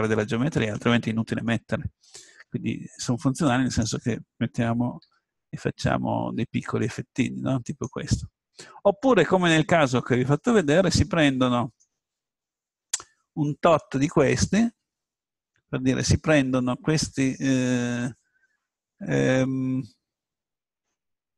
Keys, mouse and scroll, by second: 3.7-5.6 drag, 5.0 s, 7.8-8.9 drag, 8.9-11.2 middle drag, 13.2-15.6 middle drag, 20.0-21.3 middle drag.